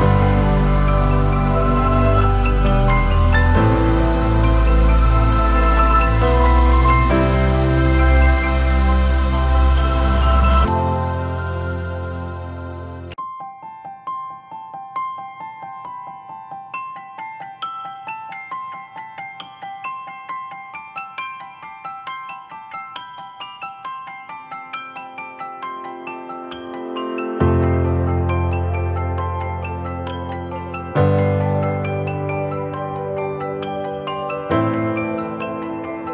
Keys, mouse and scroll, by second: 2.2 alt+s, 2.7 alt+shift+click, 5.1 Return, 24.6-25.5 scroll down 1, 30.5-31.6 typing, 34.0 typing.